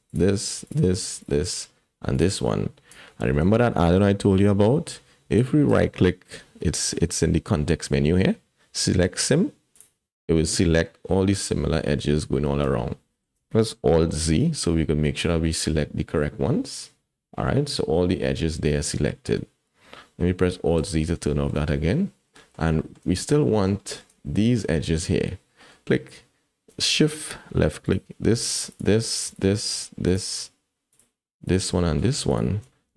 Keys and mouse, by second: 0.6 shift+click, 1.2 shift+click, 3.1 shift+click, 5.8-9.8 drag, 12.9 shift+click, 14.3 alt+z, 14.8-16.1 drag, 16.1-18.7 middle drag, 19.1 shift+click, 20.8 alt+z, 21.3 shift+click, 22.4 click, 22.8 shift+middle click, 23.2 middle click, 23.8 shift+middle click, 25.6 middle click, 27.9 shift+middle click, 29.3 shift+middle click, 30.9 shift+click, 31.4 shift+click.